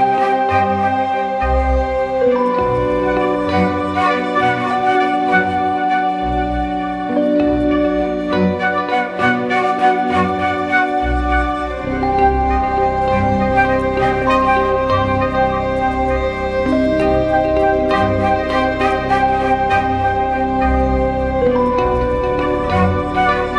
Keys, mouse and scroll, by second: 18.2 double click.